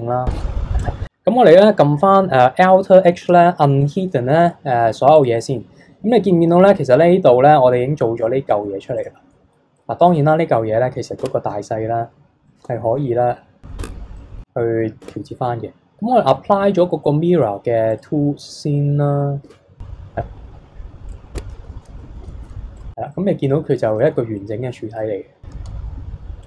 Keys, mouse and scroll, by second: 0.8 click, 3.2 alt+h, 3.8 click, 4.4 KP_3, 5.2 click, 8.3-9.0 middle drag, 9.0 click, 10.0 click, 11.2 Tab, 12.6 a, 13.8 Tab, 14.2-15.0 middle drag, 15.0 Tab, 17.9 click, 19.5 Tab, 20.2-20.5 scroll down 7, 20.5-21.1 scroll up 7, 21.1 click, 21.4 Tab, 21.6 a, 22.2 KP_3, 22.8 click, 23.1-24.9 middle drag, 24.9 KP_3, 25.7 s.